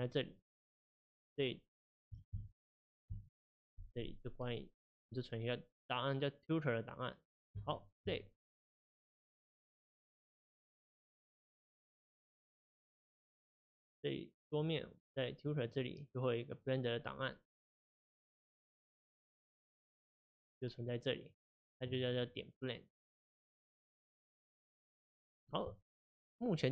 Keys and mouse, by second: 24.3-26.7 middle drag.